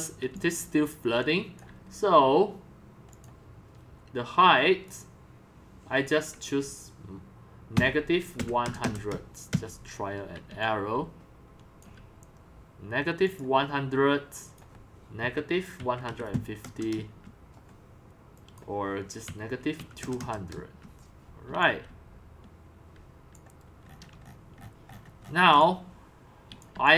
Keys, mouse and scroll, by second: 0.3-2.0 c, 1.2-3.2 drag, 4.7-7.7 drag, 7.7-12.7 typing, 8.9-9.5 scroll down 2, 10.6-13.3 drag, 13.5-15.2 drag, 15.2-23.1 typing, 16.9 Return, 18.3 click, 23.3 click, 23.9-24.2 scroll down 5, 24.2-24.7 shift+middle click, 24.4 shift+middle click, 24.9 shift+scroll up 10, 25.1 shift+middle click, 25.5 shift+middle click, 25.8-26.9 typing.